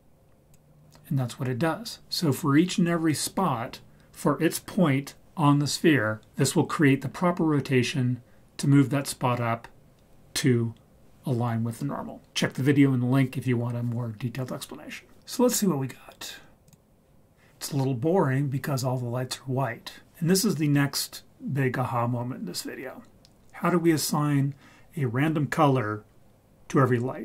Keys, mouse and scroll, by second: 16.8 click.